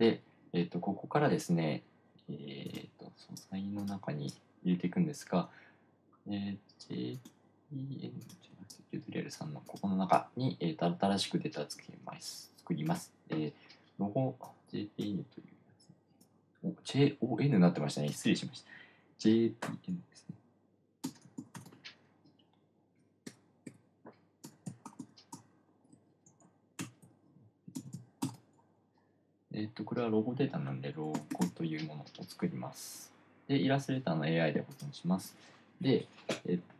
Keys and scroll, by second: 21.5-22.4 typing, 23.7 BackSpace, 24.1 BackSpace, 25.7 m, 26.3 shift+BackSpace, 27.3 n, 28.7 space, 31.1-32.4 typing.